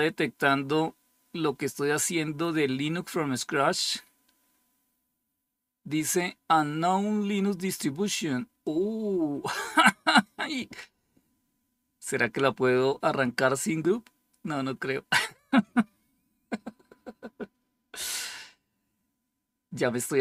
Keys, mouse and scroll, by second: 8.5-11.1 drag.